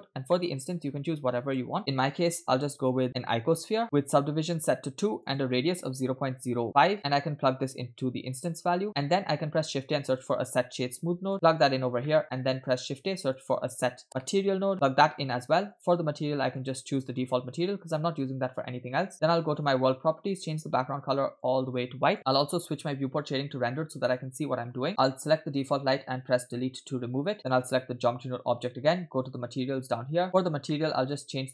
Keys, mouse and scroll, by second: 0.1-0.4 scroll up 2, 0.4 shift+middle click, 0.6 shift+a, 4.0 scroll up 2, 4.6 click, 5.2-7.0 drag, 7.7-8.6 drag, 8.9 middle click, 9.4 shift+a, 12.1 middle click, 12.2 click, 12.7 shift+a, 15.9 click, 19.6 click, 20.5-20.9 drag, 24.1 click, 24.1 middle click, 25.2 click, 26.6 Delete, 27.4 click, 29.3 click, 30.4-30.7 scroll down 2, 30.7 middle click.